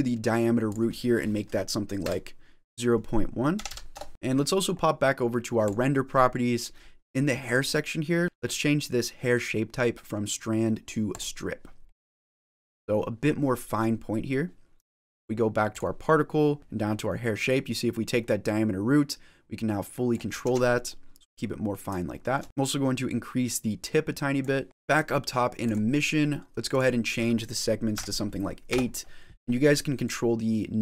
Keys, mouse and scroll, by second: 0.5 click, 5.5 click, 7.3 click, 11.0 click, 11.7 middle click, 13.5 middle click, 15.6 click, 16.6 ctrl+z, 16.6-17.3 scroll down 10, 17.3 click, 20.3 ctrl+z, 20.8 middle click, 22.0 shift+middle click, 22.4 ctrl+z, 22.4 middle click, 22.9 click, 24.6 middle click, 24.6 click, 24.8 click, 25.5 click, 26.6 click, 29.9 click.